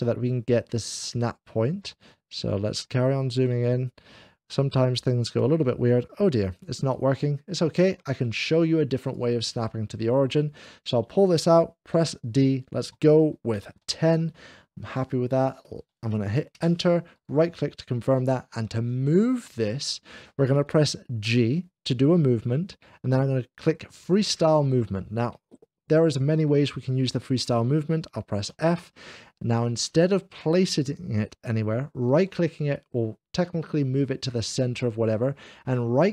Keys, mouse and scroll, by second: 0.9-1.9 middle drag, 2.7-4.5 ctrl+middle drag, 6.8-7.9 ctrl+middle drag, 7.4-7.8 ctrl+scroll down 1, 7.4 h, 8.9 ctrl+click, 10.4 click, 12.0 d, 13.4 1, 13.6 0, 16.4 Return, 17.0-18.1 right drag, 18.5 Return, 18.5 scroll down 1, 18.5 1, 18.5 0, 21.1 g, 21.3 Return, 21.3 1, 21.3 0, 28.3 f, 28.5 Return, 28.5-29.3 scroll down 1, 28.5 g, 29.3 f, 31.9-33.0 right drag, 32.2 scroll down 1, 32.2 g, 32.2 f.